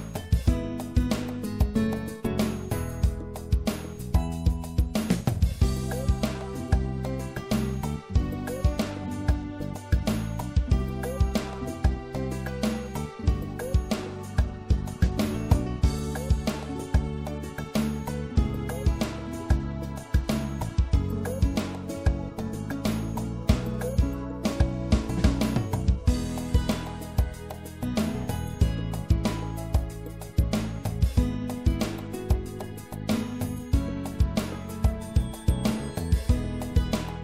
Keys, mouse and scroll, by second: 1.1 middle click, 1.5-4.6 right drag, 6.4 click, 6.5-8.0 right drag, 8.0-9.2 drag, 10.7-11.9 drag, 11.9-13.9 middle drag, 13.9 right click, 15.8-17.1 middle drag, 17.1-18.8 drag, 20.9 middle click, 23.5-27.1 right drag, 27.1-28.4 middle drag, 29.7-31.5 drag, 34.3-37.2 middle drag.